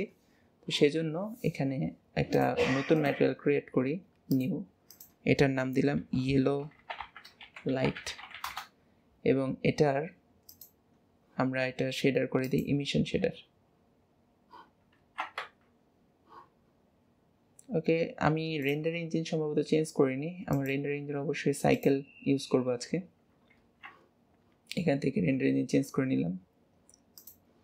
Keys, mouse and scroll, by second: 2.4 click, 3.0-6.9 drag, 10.6-13.6 drag, 18.7 click, 20.6 click, 27.3 click.